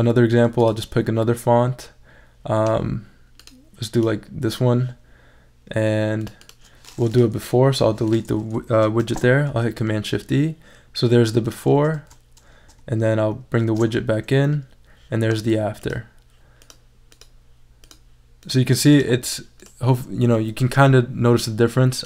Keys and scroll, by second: 7.7 BackSpace, 9.0 shift+super+e, 11.9 super+z, 12.8 shift+super+z, 13.6 shift+super+e.